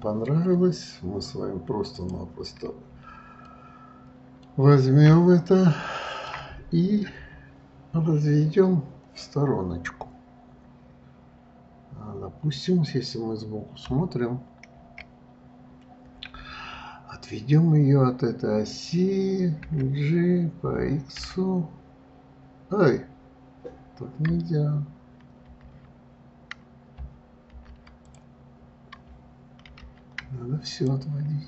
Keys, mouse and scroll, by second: 2.2 click, 3.7-8.4 middle drag, 15.0 KP_1, 19.9 g, 31.0 shift+click.